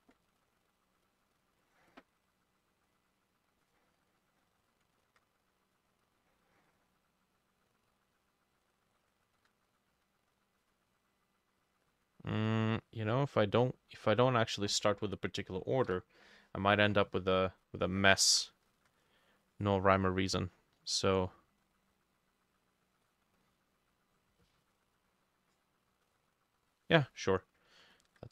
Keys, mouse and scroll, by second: 1.6 double click, 2.0 double click, 2.2 double click, 5.1 ctrl+click, 9.3 shift+click, 15.9 Delete, 18.7 ctrl+click, 28.0 ctrl+click.